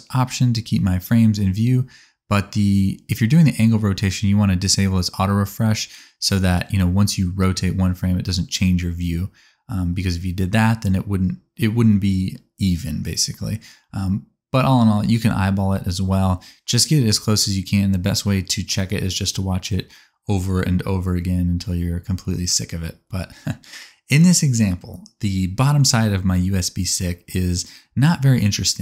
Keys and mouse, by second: 5.8 click, 8.0 click, 8.1 middle click, 8.6 click, 9.5 r, 14.6 space, 16.7-20.7 middle drag, 20.7 click, 27.6 space.